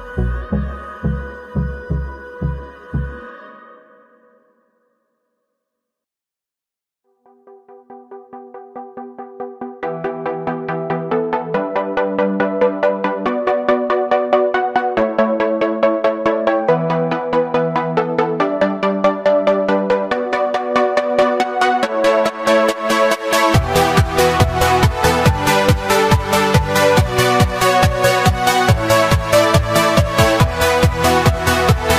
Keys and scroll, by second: 7.8 ctrl+shift+a, 8.6 ctrl+shift+a, 22.4 ctrl+l, 28.0 ctrl+shift+a.